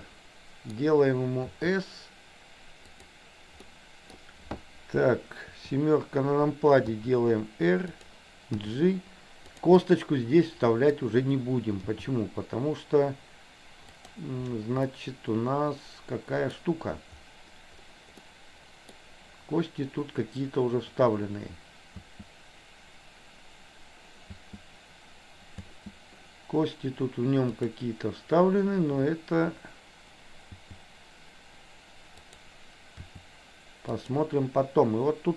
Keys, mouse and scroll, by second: 1.5 s, 3.7 middle click, 3.7 scroll up 1, 5.6 KP_7, 7.0 r, 8.7 g, 9.9-11.1 middle drag, 11.9 g, 14.8-16.5 middle drag, 18.3 middle click, 22.1 space, 24.4 space, 27.0 space, 27.7 click, 30.6 g, 33.1 r.